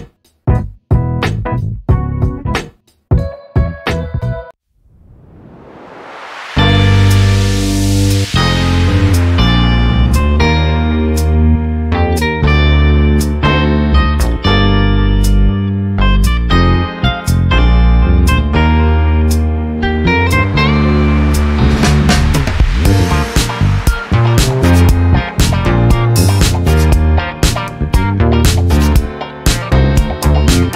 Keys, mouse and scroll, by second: 0.4 click, 1.5-2.7 shift+drag, 3.7 ctrl+g, 5.6 click, 6.2-7.0 ctrl+scroll down 6, 8.6-10.4 drag, 11.6 shift+click, 13.7-15.3 ctrl+shift+drag, 15.9 click, 16.7-17.0 ctrl+scroll up 2, 17.7 ctrl+shift+click, 19.4 shift+click, 20.7 click, 21.7 click, 22.4 click, 23.6 click, 24.9 click, 26.9 click, 27.9 click, 29.7-30.7 ctrl+drag.